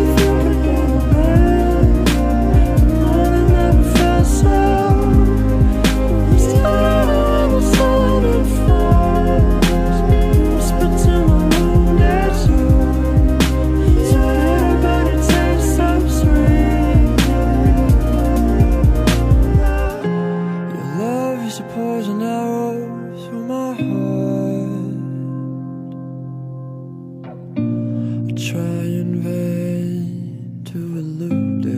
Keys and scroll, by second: 0.4 ctrl+z, 1.0 ctrl+z, 1.2 ctrl+s, 2.8 ctrl+z, 3.2 ctrl+z, 3.9 ctrl+z, 5.1 ctrl+s, 7.3 ctrl+z, 7.8 ctrl+z, 8.4 ctrl+z, 9.8 ctrl+z, 11.1 ctrl+z, 16.3 ctrl+z, 17.7 ctrl+z, 18.7 ctrl+z, 21.0 ctrl+z, 23.4 ctrl+z, 23.8 ctrl+z, 24.5 ctrl+z, 25.0 ctrl+z, 25.3 ctrl+z, 26.6 ctrl+s, 29.2 ctrl+z, 30.8 ctrl+z, 31.4 ctrl+z.